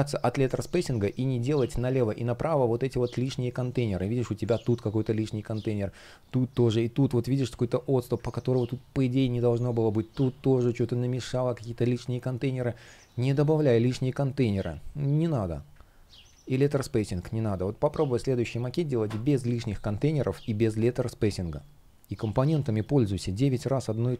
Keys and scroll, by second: 8.0 super+z, 16.2 space, 23.7 super+z, 24.0 space.